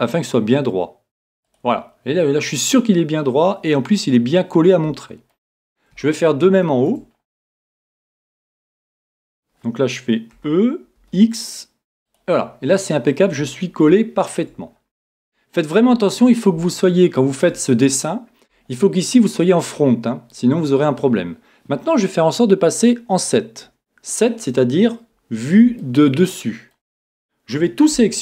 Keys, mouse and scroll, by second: 1.5 click, 5.0-9.5 middle drag, 9.4-11.2 right drag, 10.3 e, 12.1 click, 12.7-18.4 middle drag, 23.7 KP_7, 25.8-27.6 middle drag, 27.6 a.